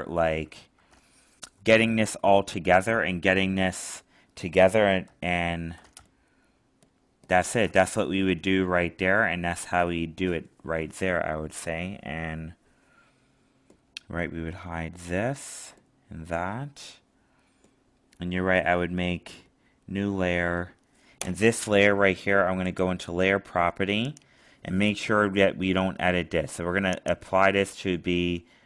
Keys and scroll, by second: 5.0 alt+space.